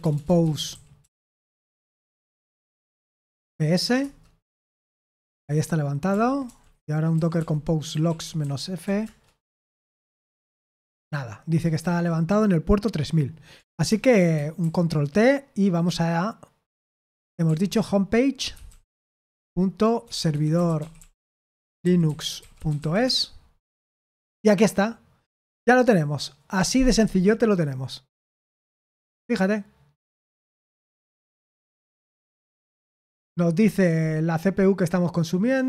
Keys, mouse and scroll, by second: 0.0-3.9 typing, 3.9 Return, 4.7 Return, 6.1 ctrl+p, 6.4-9.3 typing, 10.1 Return, 11.8 ctrl+c, 13.8 super+8, 14.6 ctrl+t, 16.9-23.2 typing.